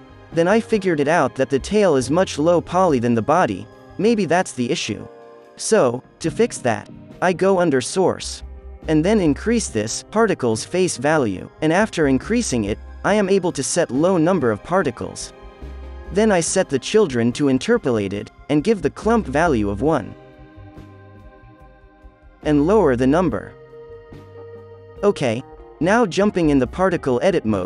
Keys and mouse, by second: 2.3-12.5 drag, 4.2 KP_0, 13.1-15.1 drag, 13.6 KP_0, 16.3-17.4 middle drag, 17.4-18.9 drag, 19.5-21.5 drag, 20.7-22.8 middle drag, 20.7 right click, 21.4 KP_3, 22.8-24.6 drag, 23.6 KP_0, 24.8 KP_0, 24.9-26.8 drag, 24.9-26.8 right drag, 26.3 f, 26.7 f, 26.8-27.6 middle drag.